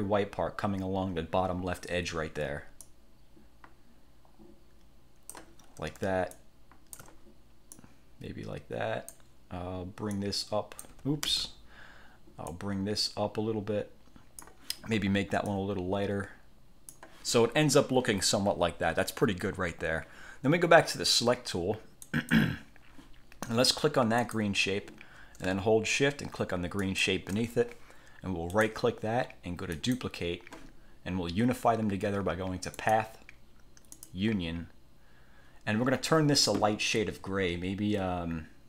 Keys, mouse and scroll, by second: 2.9 click, 6.4 ctrl+shift+click, 7.8 click, 10.2 click, 11.4 ctrl+z, 12.6-14.8 drag, 15.6-17.3 drag, 22.2 click, 24.4 click, 27.0 shift+click, 28.6 click, 29.9 click, 32.9 click, 34.1 click.